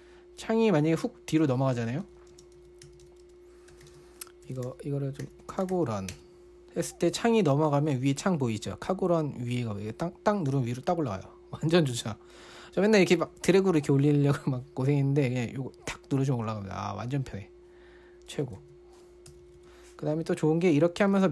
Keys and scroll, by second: 1.0 typing, 2.2-7.0 typing, 11.2 typing, 15.0 typing, 18.6-20.0 typing.